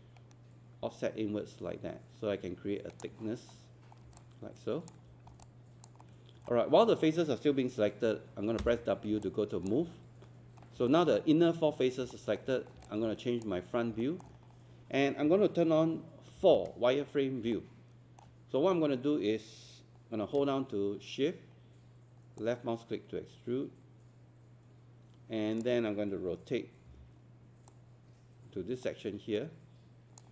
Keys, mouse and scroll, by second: 17.7-30.3 alt+middle drag.